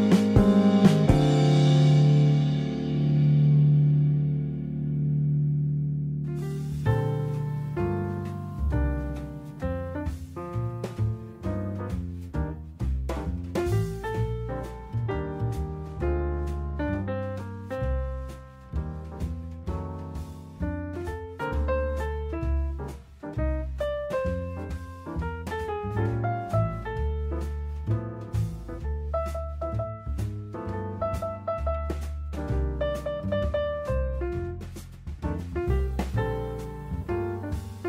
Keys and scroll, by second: 1.6 Escape, 5.8 Escape, 9.8 Escape, 12.0 Escape, 13.5 Escape, 17.2 Escape, 21.6 Escape, 24.2 Escape.